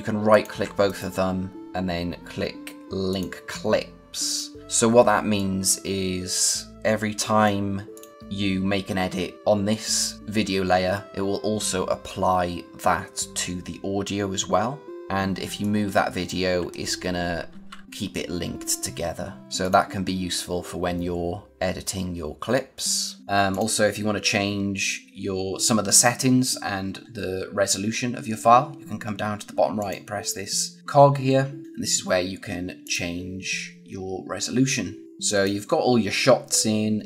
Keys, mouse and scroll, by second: 23.2 click, 29.7 click, 31.6 click, 35.0 click.